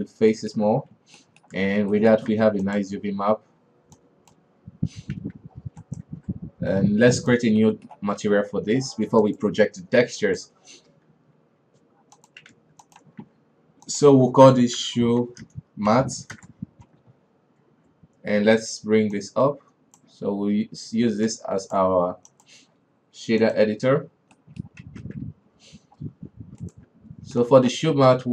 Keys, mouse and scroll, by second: 0.5 Tab, 0.7-1.1 middle drag, 1.1 alt+a, 1.7 middle drag, 2.0 a, 2.4-3.2 shift+middle drag, 3.2 ctrl+a, 4.5-5.6 drag, 5.6 alt+a, 5.8-6.2 scroll down 4, 6.2 right click, 6.5 alt+w, 8.0-9.8 middle drag, 9.8-12.7 drag, 12.7 w, 13.4 ctrl+a, 16.8-18.9 drag, 19.6-26.8 drag, 26.8 scroll down 4, 27.0 right click.